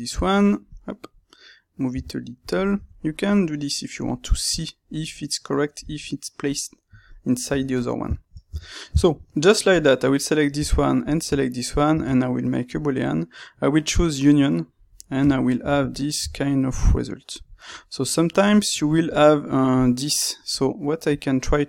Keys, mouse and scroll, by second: 0.1 click, 1.9 g, 2.5 click, 2.7 Tab, 2.9-9.6 middle drag, 7.4 Tab, 8.4 Tab, 9.6 click, 10.9 shift+click, 11.8 space, 14.7-19.1 middle drag, 19.1 click, 21.0 click.